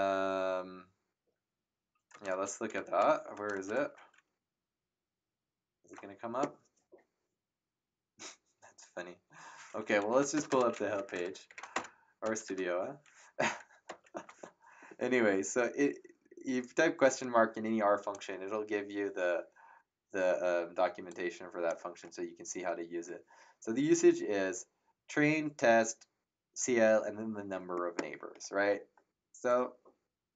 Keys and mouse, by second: 1.2 BackSpace, 2.7 space, 3.3 BackSpace, 3.9 shift+9, 10.1 End, 10.3 BackSpace, 10.9 Home, 11.4 shift+/, 11.7 Return, 12.2 BackSpace, 13.8 ctrl+Return, 17.1 click, 21.0 click.